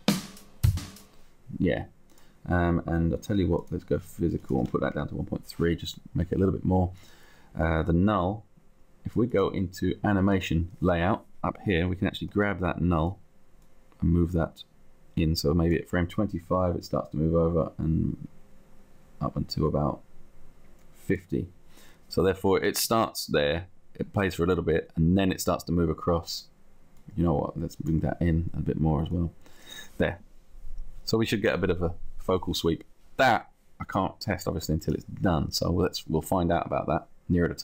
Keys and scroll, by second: 5.2 Down, 6.1 Down.